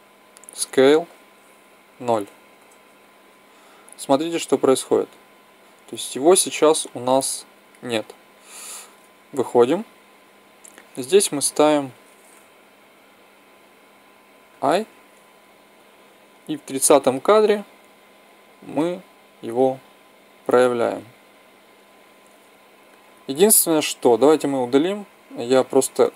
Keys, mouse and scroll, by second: 0.3 s, 4.6 click, 6.4-9.3 middle drag, 9.3 Tab, 14.4 i, 15.8-17.3 drag.